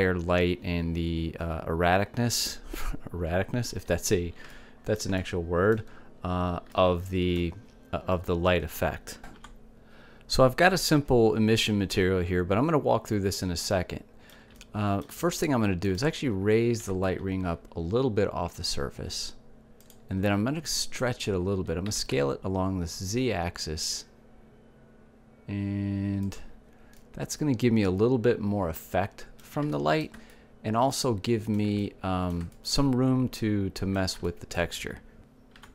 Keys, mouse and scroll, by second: 10.7-15.5 middle drag, 18.6 g, 21.7-24.4 drag, 23.9 s, 28.1-30.1 drag, 30.1 middle click, 31.5-33.6 middle drag.